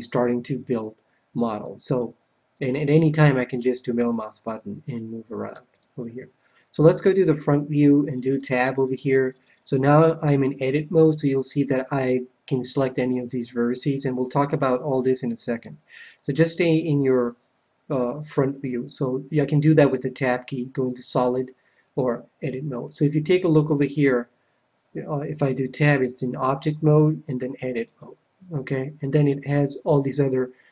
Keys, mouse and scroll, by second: 3.5-5.1 middle drag, 5.6 KP_1, 8.2 Tab, 9.8-11.6 middle drag, 15.6 KP_1, 19.8 Tab, 21.2 Tab, 25.2 Tab, 27.1 Tab, 27.7-29.4 drag.